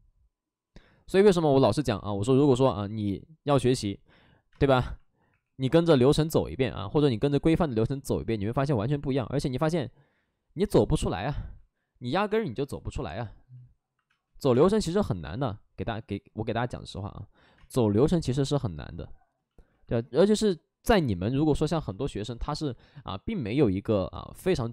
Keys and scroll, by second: 0.8 ctrl+d, 4.4 space, 5.2 3, 14.0 space, 14.3 3, 17.4 space.